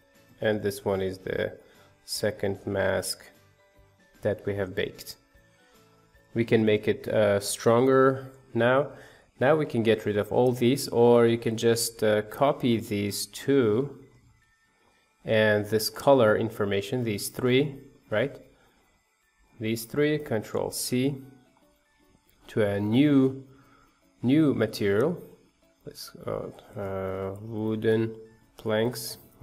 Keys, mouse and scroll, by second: 0.5 middle click, 0.8-1.5 scroll up 2, 1.5-5.6 middle drag, 6.2 scroll down 1, 6.5 shift+middle click, 7.0-8.1 scroll down 1, 8.1-10.5 scroll down 1, 12.8-13.7 scroll down 1, 13.7 click, 16.0-19.4 drag, 25.3-29.4 drag.